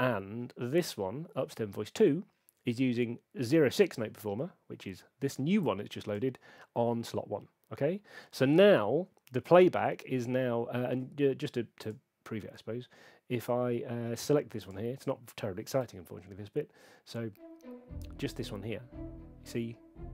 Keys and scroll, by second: 15.8 p.